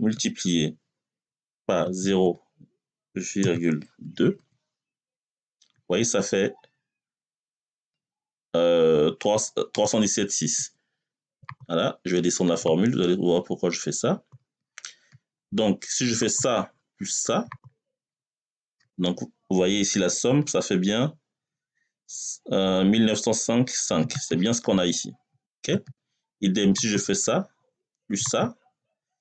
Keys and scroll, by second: 0.0 \, 1.7 0, 3.2 ,, 3.9 2, 5.0 Return.